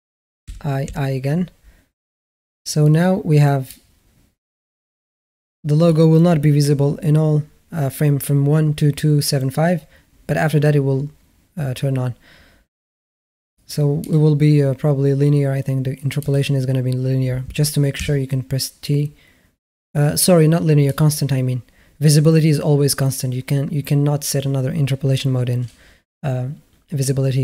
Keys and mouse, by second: 0.3 i, 0.6 i, 4.5-7.5 drag, 14.7 click, 16.1 click, 17.8 t.